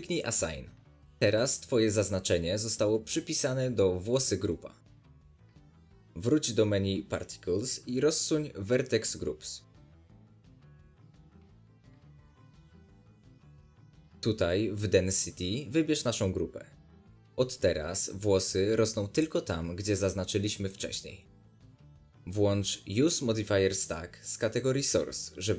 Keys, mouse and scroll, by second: 0.3-2.0 drag, 2.0 alt+a, 3.8-4.4 drag, 4.4-11.4 middle drag, 6.4 alt+a, 7.7 Tab, 11.4-13.2 scroll down 2, 13.2 scroll down 1, 13.5 click, 14.1-14.8 scroll down 2, 17.7 click, 17.7 scroll down 2, 17.8-20.7 middle drag, 20.7-25.5 drag.